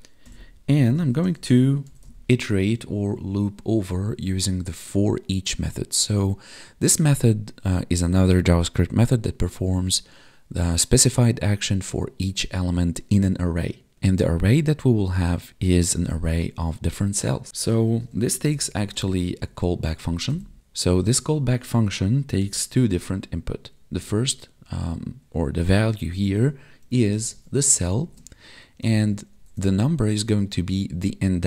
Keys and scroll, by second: 28.0 space.